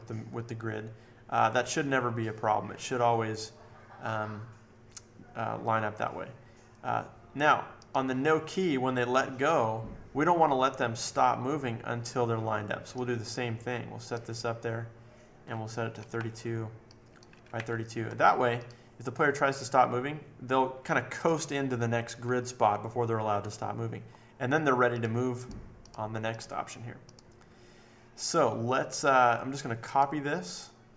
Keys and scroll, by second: 15.7-18.0 typing.